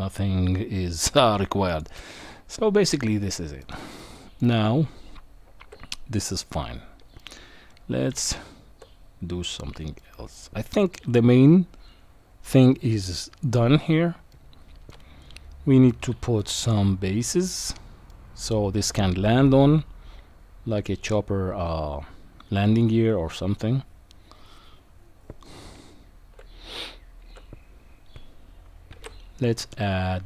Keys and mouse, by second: 3.0-3.6 middle drag, 4.0 middle click, 4.8 Tab, 7.2 shift+middle click, 8.3 Tab, 10.0-10.8 middle drag, 13.4 click, 14.3-14.9 middle drag, 16.0-16.4 middle drag, 18.1-18.5 middle drag, 19.8 Tab, 26.7 Tab, 28.9 shift+a.